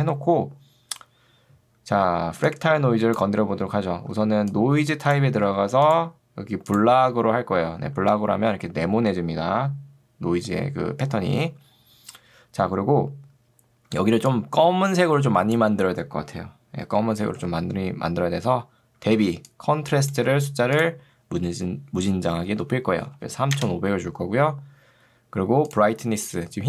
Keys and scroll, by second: 2.3 ctrl+2, 3.6 Escape, 4.2 ctrl+2, 5.6 Escape, 14.0 ctrl+2, 17.4 Escape, 19.2 ctrl+2, 20.4 Escape, 22.6 5, 23.6 Return.